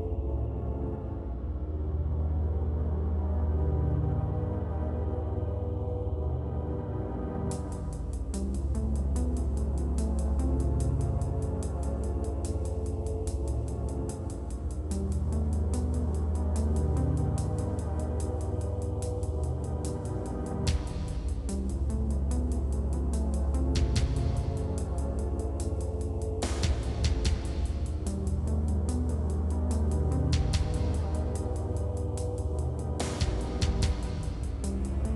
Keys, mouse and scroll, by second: 1.5 click, 1.9 middle click, 2.8 g, 3.1 x, 3.4 middle click, 4.4 n, 5.1 click, 5.7 g, 5.9 x, 6.2 click, 7.4 click, 8.1 Tab, 8.9 KP_1, 9.7 g, 10.8 middle click, 12.5 r, 13.7 Escape, 13.9 Tab, 14.5 r, 15.3 middle click, 16.1 shift+d, 16.9 middle click, 17.9 r, 18.6-19.7 middle drag, 19.7 scroll up 3, 19.8 middle click, 20.4 scroll down 4, 20.5 middle click, 20.7 shift+d, 21.5 middle click, 22.4 shift+d, 23.0 middle click, 23.7 shift+d, 24.4 shift+d, 25.0 middle click, 25.3 shift+d, 25.9 middle click, 26.2 shift+d, 26.8-35.1 middle drag.